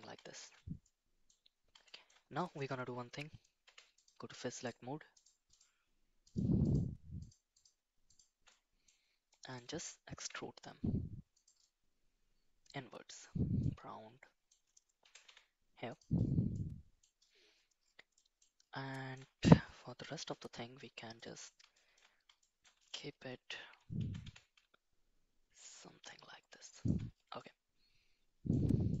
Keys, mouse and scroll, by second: 0.4 shift+z, 0.8 middle click, 1.9 shift+middle click, 3.6 3, 4.0 click, 4.5 shift+click, 5.1 shift+click, 5.5 shift+click, 7.2 shift+click, 7.5 shift+click, 8.5 middle click, 9.3 middle click, 10.2 e, 11.6-13.2 middle drag, 13.7 middle click, 15.0 g, 16.5 middle click, 18.2 middle click, 18.9 shift+middle click, 20.1 ctrl+i, 21.1 middle click, 21.7 middle click, 22.4 middle click, 24.0 g, 27.4-28.5 middle drag, 28.9-29.0 middle drag.